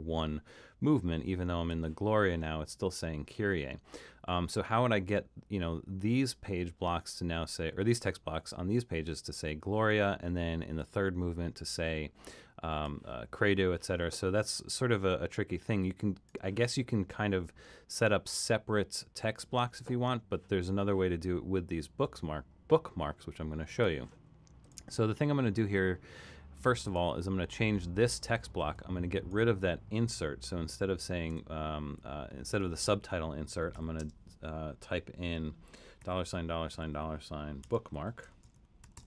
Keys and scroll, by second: 31.3 BackSpace, 33.7-34.0 typing, 35.3-39.0 typing.